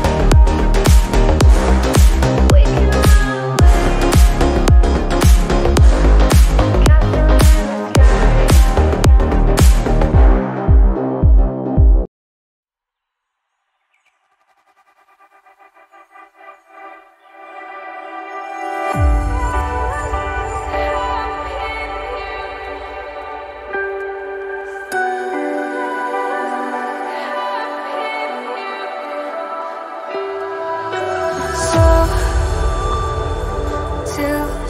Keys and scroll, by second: 5.9 alt+BackSpace, 19.7-20.6 typing.